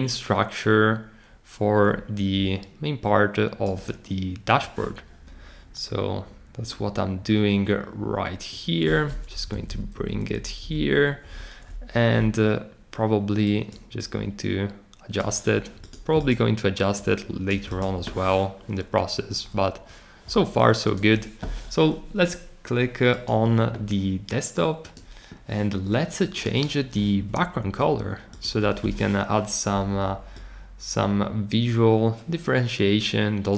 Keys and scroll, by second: 9.3 Up, 9.5 Up, 9.6 Up, 9.9 Up, 10.3 Up, 10.6 Down.